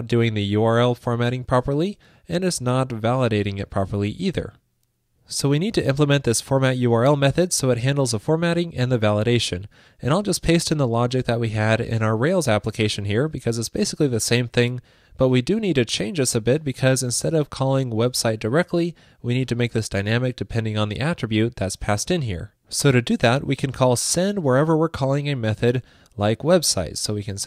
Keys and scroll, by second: 11.1 super+v, 13.1 super+v, 20.8 super+c.